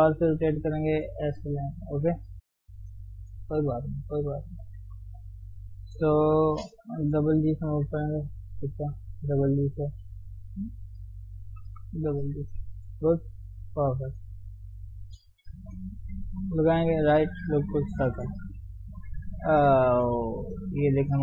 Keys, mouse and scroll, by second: 2.7 KP_3, 6.2 click, 7.1 g, 8.1 click, 8.5 click, 8.8 g, 10.0 click, 10.3 g, 11.3 click, 11.5 g, 12.2 g, 12.9 click, 15.6 ctrl+r, 17.9-18.9 right drag, 18.9-21.2 middle drag.